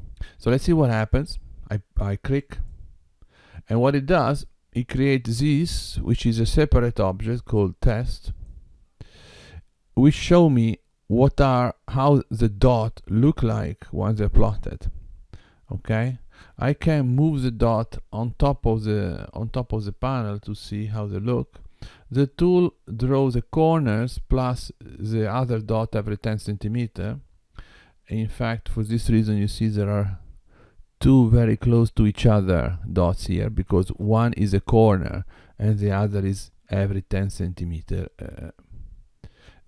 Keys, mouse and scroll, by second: 2.5 click, 8.3 click, 17.2 g, 29.9-31.0 scroll up 3, 38.5-39.6 scroll down 2.